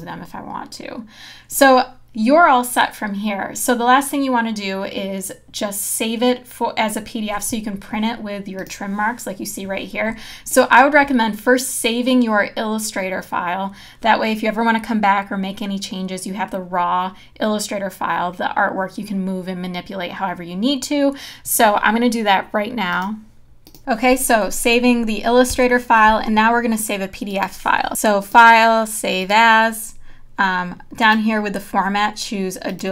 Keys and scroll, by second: 25.5 Return.